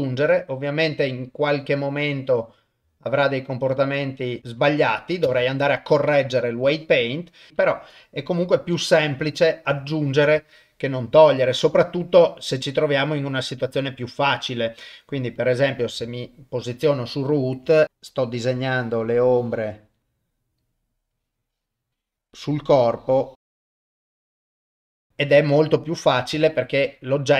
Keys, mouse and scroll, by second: 5.3 shift+space, 6.6 click, 9.3 ctrl+middle click, 9.8 shift+middle click, 11.4-13.6 drag, 15.4 click, 16.1 shift+middle click, 17.0 shift+middle click, 17.8 click, 18.7-19.9 drag, 21.1-22.2 drag, 22.8 click, 23.7 click, 23.9 shift+middle click, 24.0 click, 24.9 ctrl+middle click, 25.0 shift+space, 26.4 ctrl+middle click.